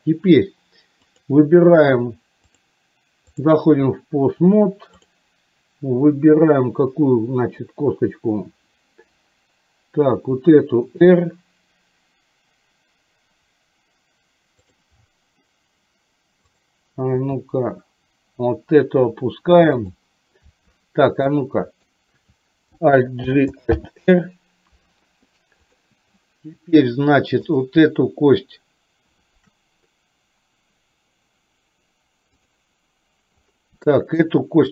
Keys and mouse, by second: 1.2 click, 2.7 click, 10.3 r, 16.5 click, 17.3 r, 21.5 click, 23.3 alt+g, 23.9 alt+r, 25.6 click, 27.6 click, 34.0 shift+middle click.